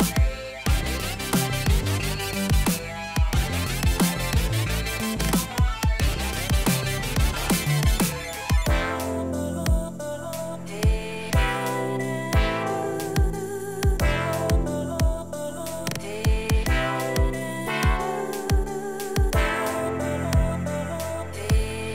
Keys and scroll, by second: 7.5 ctrl+t, 18.2 ctrl+z, 20.0 ctrl+shift+z.